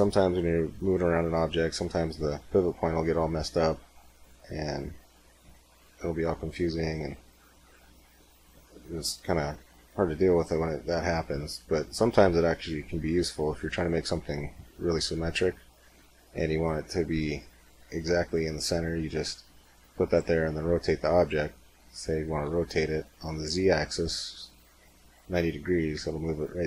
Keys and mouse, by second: 2.0 middle click, 2.6 middle click, 2.8 middle click, 3.2 r, 3.7-4.7 middle drag, 7.7-9.7 middle drag, 12.0-16.4 middle drag, 22.3 r.